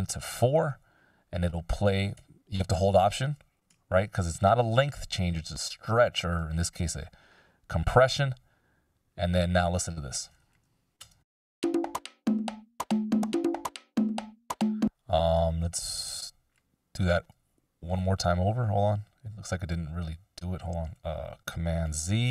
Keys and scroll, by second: 11.2 space, 14.2 space.